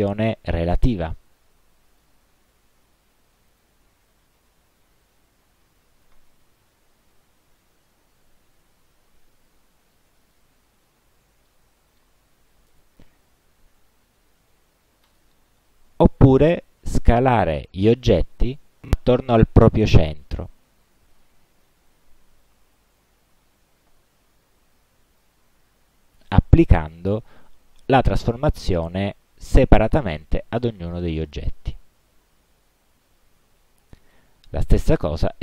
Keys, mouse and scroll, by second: 2.0 click, 3.6 click, 5.1 click, 5.9 click, 7.2 5, 8.8 BackSpace, 9.2 ., 10.3 click, 11.6 click, 15.2 click, 18.2 shift+click, 20.8 click, 21.5-22.4 typing, 22.8 Tab, 25.2 click, 34.1 click.